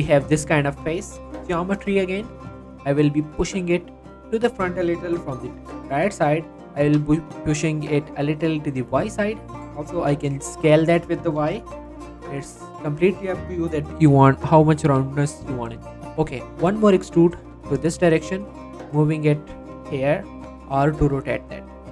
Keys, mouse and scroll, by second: 1.8-2.2 scroll up 1, 2.2 z, 3.4 g, 4.4 click, 5.8 z, 6.4 shift+middle click, 6.8 g, 7.1 y, 9.0 click, 9.5 s, 10.0 y, 11.0 click, 11.4 g, 11.6 y, 12.3 click, 12.5-12.9 scroll down 1, 15.0 shift+middle click, 15.3-15.7 shift+scroll up 2, 15.8 shift+middle click, 16.7 e, 18.2 click, 18.5 g, 19.4 click, 20.0 r, 21.5 click, 21.8-21.9 scroll down 2.